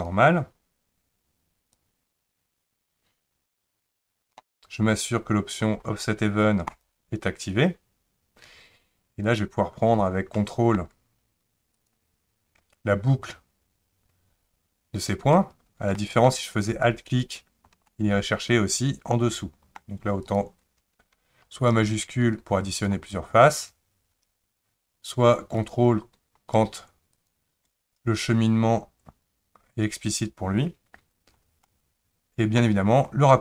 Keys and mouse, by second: 1.7 click, 2.0-4.5 drag, 6.7 click, 10.3 middle click, 11.7 ctrl+click, 16.0 middle click, 17.2 alt+click, 17.9-19.8 middle drag, 20.2 click, 21.7 shift+click, 22.7 shift+click, 25.6 click, 31.7 middle click.